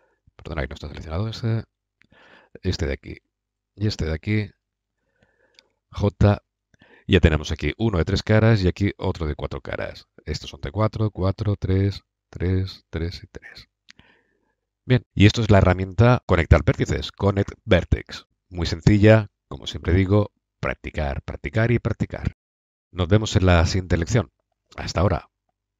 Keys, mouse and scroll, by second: 0.4 ctrl+z, 1.4 a, 5.4 j, 14.1-17.7 middle drag.